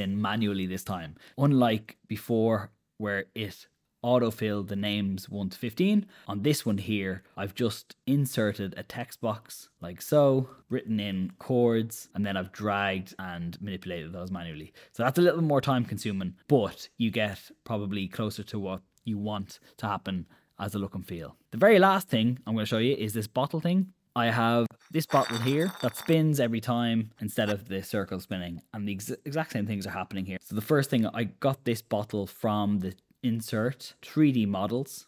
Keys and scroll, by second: 2.4 Escape, 10.8-12.4 typing, 17.6 BackSpace, 24.4 super+Return, 28.6 Escape, 28.8 §.